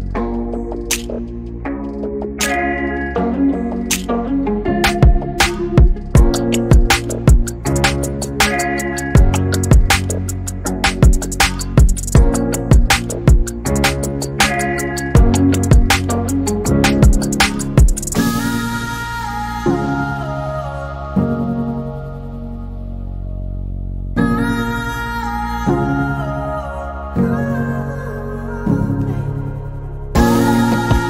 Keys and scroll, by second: 3.1 r, 7.3 e, 11.7 p, 13.5-14.5 typing, 16.7-17.4 typing.